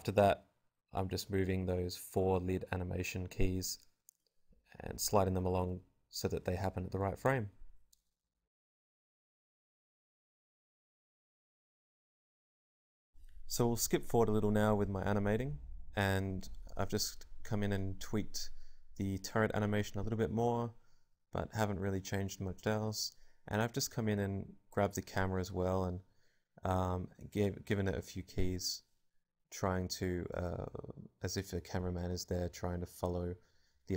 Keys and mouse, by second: 0.0-1.1 typing, 0.6 click, 0.8 right click, 1.0 click, 1.2 click, 1.6 alt+a, 1.7 alt+a, 1.7 click, 3.4-5.3 drag, 9.3 alt+a, 13.2-15.0 drag, 24.3-26.7 right drag, 26.7 middle click, 29.8-31.4 drag, 30.3 Left, 30.4 Left, 30.5 Left, 30.7 Left, 30.9 Left, 31.1 Right, 31.2 Right, 31.4 Right, 32.7 r.